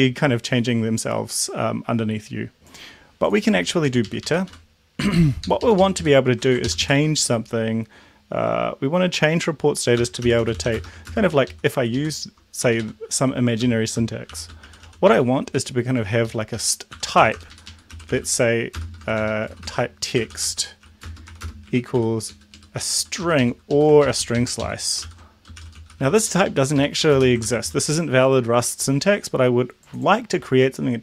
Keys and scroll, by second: 3.9 Up, 4.1 Up, 4.3 Up, 4.6 End, 4.6 Home, 5.2 End, 5.5 Left, 5.7 Left, 5.9 Left, 6.0 Left, 6.4 ctrl+shift+Right, 6.7 ctrl+shift+Left, 10.0-11.5 typing, 11.6 Left, 12.7 Right, 12.8 Right, 13.3-15.4 typing, 15.5 Down, 16.3 Left, 16.6 Up, 17.0 Home, 17.3 Return, 17.4 Return, 17.5 Up, 17.7 Up, 18.0-21.9 typing, 22.0 End, 22.3 Down, 22.6 Down, 23.2 Up, 23.8 End, 24.1 ctrl+shift+Left, 25.1 ctrl+x, 25.4-27.7 typing, 26.6 Up, 26.8 Left, 27.1 Right, 27.4 ctrl+v.